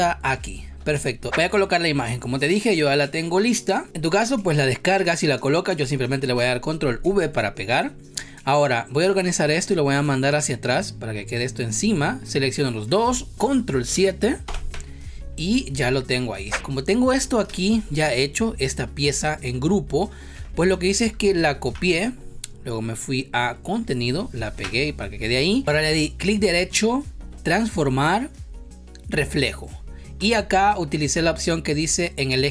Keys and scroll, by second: 0.7 v, 6.2 ctrl+v, 14.4 ctrl+7, 16.4 a, 16.5 space, 20.3 ctrl+z, 21.6 ctrl+c, 24.5 ctrl+v.